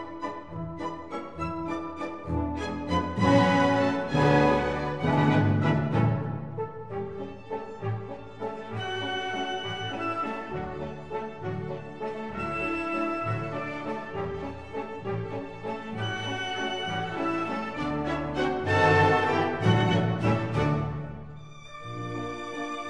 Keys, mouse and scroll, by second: 3.4-7.3 middle drag, 7.3-15.2 drag, 14.4 s, 19.4-21.5 middle drag.